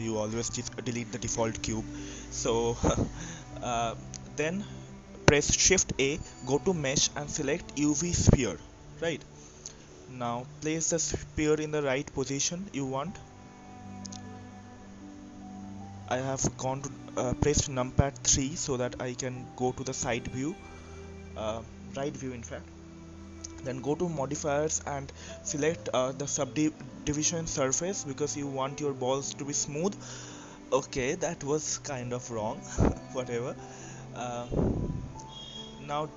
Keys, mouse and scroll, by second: 0.0 click, 1.3 click, 2.0-3.1 middle drag, 3.1-3.5 scroll up 1, 3.5-4.8 middle drag, 4.8 shift+a, 10.6-12.4 drag, 12.4 KP_3, 13.1-13.9 scroll up 2, 13.9 click, 18.6-19.6 middle drag, 19.6-20.2 scroll down 2, 20.2-23.2 middle drag, 23.2-23.9 drag, 25.4-26.9 drag, 28.4-29.3 right drag, 29.3-29.9 middle drag, 29.9-30.6 scroll up 1, 30.6 middle click, 31.1-31.5 scroll up 1, 31.5-33.5 middle drag, 33.5-36.1 drag.